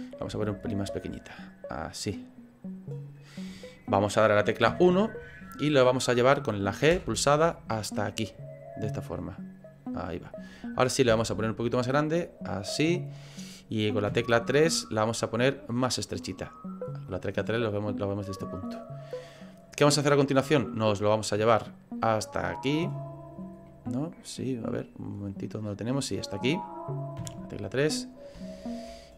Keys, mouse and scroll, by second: 0.3 s, 4.7 KP_1, 6.9 g, 14.1 KP_3, 15.8 click, 19.3 click, 22.0 click, 23.6 middle click, 24.8-25.8 scroll down 6, 25.4 middle click, 27.2 KP_3, 27.9-28.3 scroll up 5, 28.4 shift+middle click, 29.0 scroll up 3.